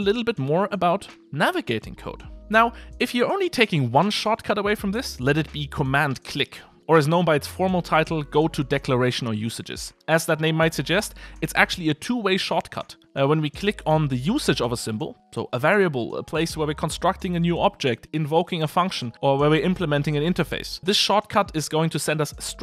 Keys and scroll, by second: 6.8 super+b, 14.6 super+b.